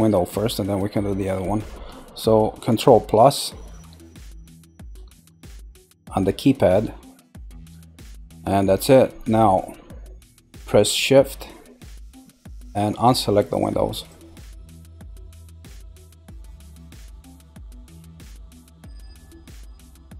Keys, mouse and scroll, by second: 0.3 shift+middle click, 0.9-3.9 scroll down 1, 10.0-12.9 middle drag, 12.9 click, 13.4 click, 13.9 click, 14.4 click, 15.1 click, 15.7 click, 16.2 click, 16.6 shift+click, 17.2 click, 17.7 click, 18.1 click, 18.6 click, 19.0-20.1 middle drag.